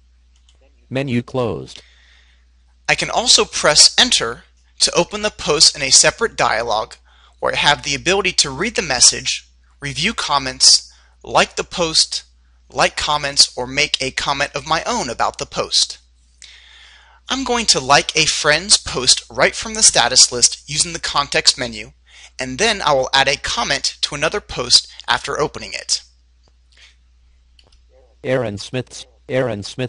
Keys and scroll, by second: 25.5 Down.